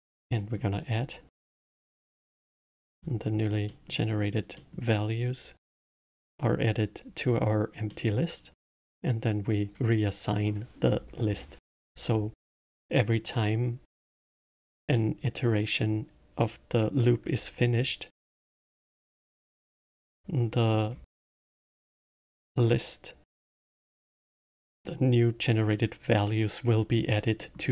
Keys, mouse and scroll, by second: 0.3 middle click, 1.1 click, 2.4 middle click, 2.8-3.6 scroll down 3, 3.6-5.8 middle drag, 5.8 click, 7.8-8.8 middle drag, 8.8 click, 14.9-15.8 middle drag, 15.8 click, 17.8-18.8 drag, 18.8 middle click, 19.6 click, 20.4 middle click, 20.9 scroll down 2, 21.2-24.6 middle drag, 24.6 click, 27.3-27.7 middle drag.